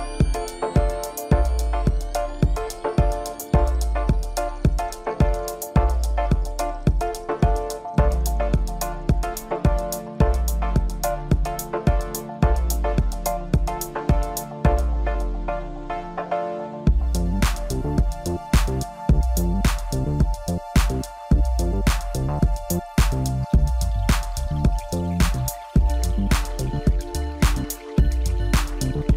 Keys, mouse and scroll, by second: 1.7-4.3 drag, 6.5 KP_1, 7.3-7.7 scroll up 2, 8.0 Tab, 9.2-9.9 ctrl+KP_8, 10.7 scroll up 2, 11.7 KP_Divide, 13.2 click, 15.2 shift+click, 16.2 ctrl+KP_Add, 16.8 ctrl+KP_Add, 18.2 scroll up 3, 18.6-21.0 middle drag, 21.0-21.3 scroll down 2, 21.3-22.8 middle drag, 22.8 drag, 23.7-25.0 drag, 25.5-28.0 middle drag, 28.0 KP_Divide, 28.8 scroll down 1.